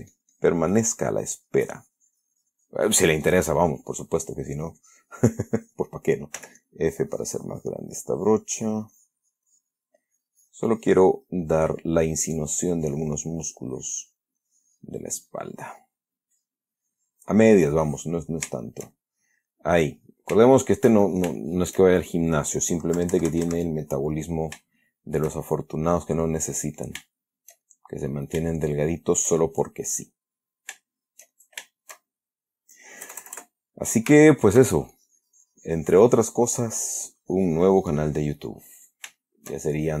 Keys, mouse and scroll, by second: 6.7 f, 6.9-8.4 drag, 11.5-14.7 drag, 15.9 click, 16.6-18.8 drag, 18.9-20.7 shift+middle drag, 20.8 shift+click, 21.7 shift+click, 23.3 KP_Subtract, 25.1 shift+click, 25.8 shift+click, 26.2 middle click, 26.4-27.2 middle drag, 27.4 shift+click, 28.3 click, 28.8 shift+click, 29.7 shift+click, 30.5-33.0 middle drag, 33.4 KP_Add, 34.5-35.0 shift+middle drag, 35.2-38.8 shift+drag, 38.8-39.4 middle drag, 39.5-40.0 shift+middle drag.